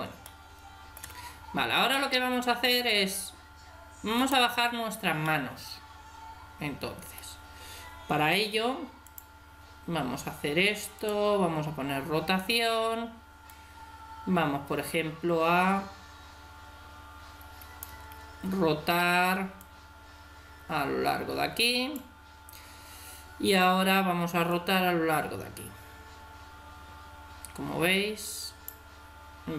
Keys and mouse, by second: 4.2-5.4 right drag, 5.4-7.7 middle drag, 9.0-10.7 drag, 11.1-12.7 drag, 13.5-15.3 drag, 17.9 Escape, 19.6-21.4 drag, 24.5-26.2 drag.